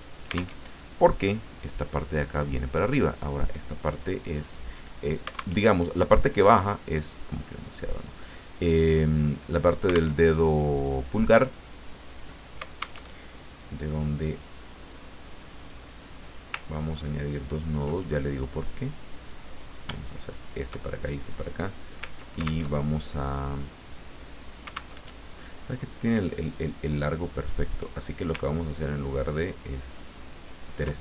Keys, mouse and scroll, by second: 0.7 alt+Tab, 5.6 alt+Tab, 7.3-8.3 drag, 10.2 alt+Tab, 13.0 alt+Tab, 15.6 click, 16.7-17.1 ctrl+scroll up 2, 17.5 ctrl+scroll up 2, 18.3 click, 19.2 click, 20.4 shift+click, 22.7 ctrl+alt+Tab, 24.9 alt+Tab, 26.5-28.1 drag, 28.9-30.9 ctrl+drag.